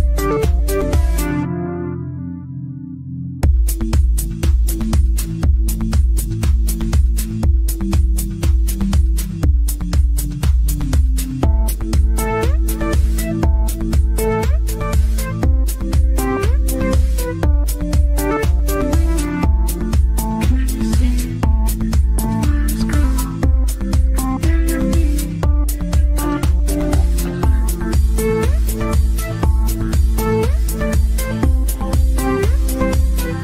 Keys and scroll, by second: 2.4 Escape, 3.8 Delete.